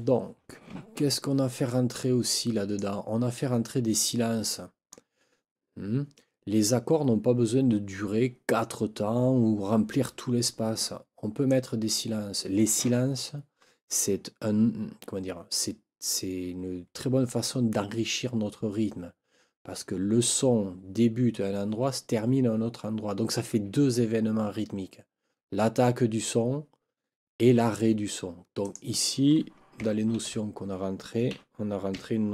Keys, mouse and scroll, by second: 2.2 click, 11.4 click, 28.6 click, 30.1 ctrl+t, 31.3-32.3 typing.